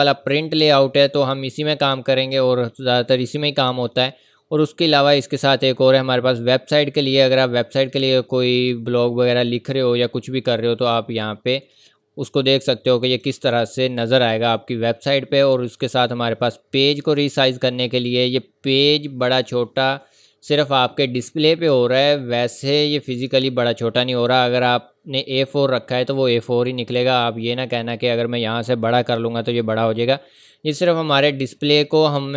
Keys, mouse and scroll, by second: 2.2-2.8 scroll up 1, 13.1 click, 14.0-14.5 scroll up 1, 16.5 click, 25.1-27.4 scroll up 1, 29.0 click, 31.5 click.